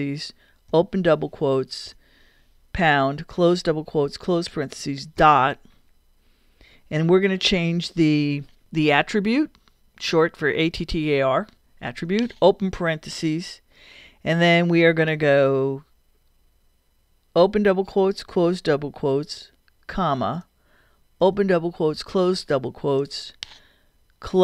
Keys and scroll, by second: 0.7 shift+', 1.9 shift+3, 3.3 shift+', 4.1 shift+0, 5.2 shift+., 8.6 r, 12.5 shift+9, 17.4 shift+', 19.9 ,, 20.4 shift+,, 21.2 shift+'.